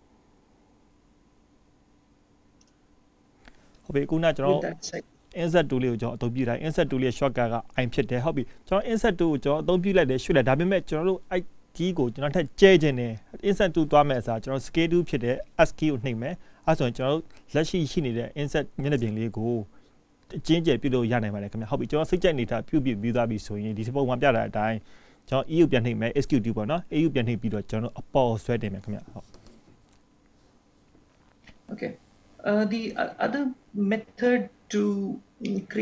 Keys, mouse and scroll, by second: 11.2 click, 13.0 click, 14.4 click, 35.6 middle click.